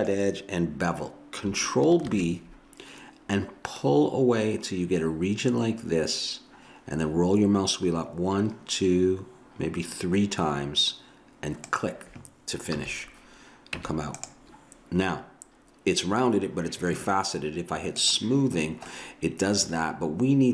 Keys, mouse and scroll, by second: 2.1 ctrl+b, 12.7 a, 13.8 Tab, 18.0-19.8 drag, 18.6 middle click, 18.9-20.5 middle drag.